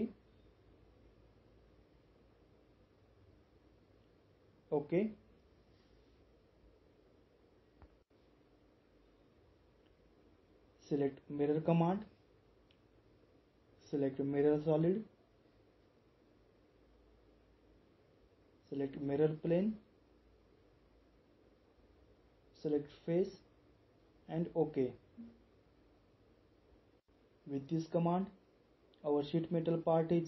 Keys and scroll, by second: 1.8 typing, 3.8 typing.